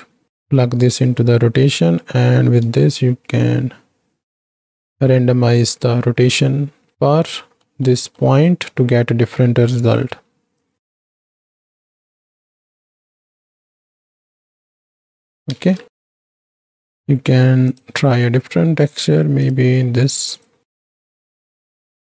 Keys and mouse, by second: 2.1 middle click, 2.8-6.9 shift+drag, 7.2-7.6 middle drag, 7.8 middle click, 9.6 middle click, 10.7 shift+click, 11.3 shift+click, 12.5 shift+click, 13.4 shift+click, 14.3 ctrl+space, 14.4 middle click, 14.6 middle click, 14.8 middle click, 15.7 ctrl+space, 16.1 drag, 21.2 click.